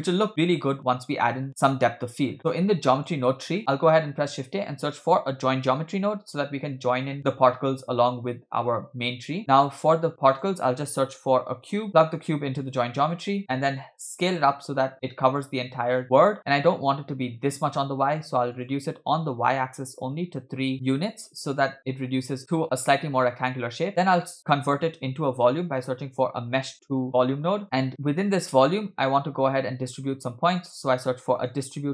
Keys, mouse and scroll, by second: 2.3-2.7 scroll down 5, 2.7 middle click, 3.5 middle click, 3.8 shift+a, 7.8 click, 9.4 middle click, 9.4 scroll up 2, 9.6 shift+a, 12.0-13.2 drag, 13.6-14.3 scroll up 2, 14.3-16.4 shift+drag, 16.6-17.3 scroll down 2, 18.5-20.0 drag, 23.9 middle click, 23.9-24.7 scroll down 2, 23.9 shift+a, 27.9-28.3 drag, 28.7 click, 29.3-29.6 scroll up 2, 29.9 shift+a.